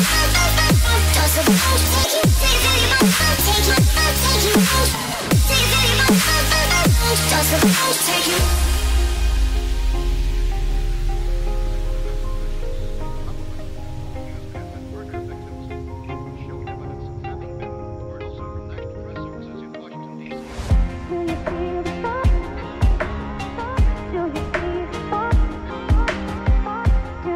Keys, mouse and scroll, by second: 0.5-1.2 scroll down 1, 1.3 shift+a, 3.1 scroll down 1, 3.3-3.8 middle drag, 4.8 g, 6.1 click, 6.1 y, 6.4-7.4 middle drag, 8.3 click, 9.6 r, 9.9 y, 11.7 click, 12.0 ctrl+z, 12.5-13.4 scroll down 4, 13.4 ctrl+z, 13.8-14.6 scroll down 2, 15.0 ctrl+shift+z, 16.2 click, 16.7-17.5 scroll down 2, 17.5 r, 17.7 y, 19.3 x, 20.8 z, 23.1 right click, 23.8 ctrl+z, 25.0 ctrl+z, 26.1 r, 26.5 z.